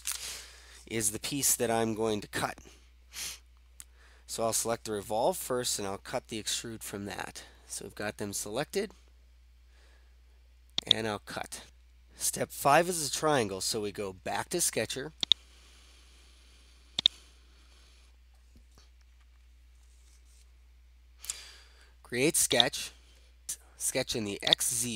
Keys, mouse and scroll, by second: 10.8-11.7 drag, 15.4-16.3 drag, 17.1-18.1 drag, 22.6 click, 24.5-24.9 drag.